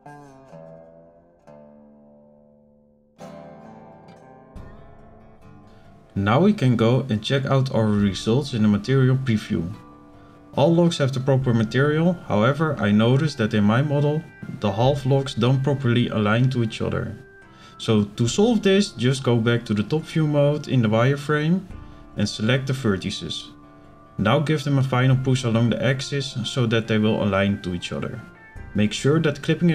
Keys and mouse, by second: 0.2 shift+middle click, 1.3 click, 2.8 click, 4.1-4.4 middle drag, 4.5 z, 5.6 shift+middle drag, 8.2 click, 9.7-10.2 middle drag, 11.2-11.7 shift+middle drag, 11.9 z, 12.6 shift+middle drag, 12.7 shift+click, 14.6 click, 15.7 middle click, 16.5 KP_7, 17.6 shift+middle click, 19.2 b, 22.7 click, 25.0 click, 26.2 click, 27.5 b.